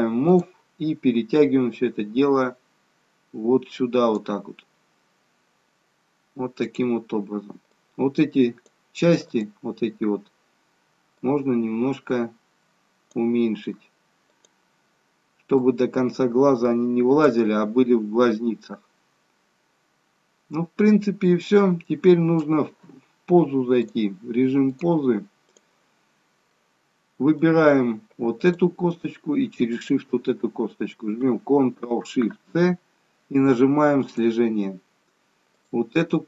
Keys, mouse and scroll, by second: 0.3 click, 1.8 click, 6.7 click, 7.7 click, 9.3 click, 11.2 click, 14.4 click, 15.6 click, 18.4 middle click, 23.8 click, 24.7 click, 26.5 middle click, 28.4 click, 29.8 shift+click, 32.6 ctrl+shift+c, 35.6 click.